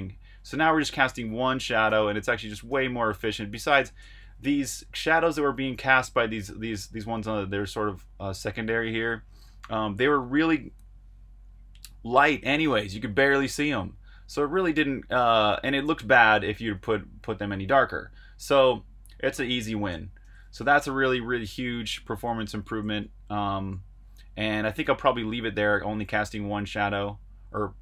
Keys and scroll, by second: 0.0-2.6 typing, 3.7-7.5 typing, 10.1 typing, 13.0 typing, 20.2 super+q, 21.0 super+Tab, 22.8 super+Tab.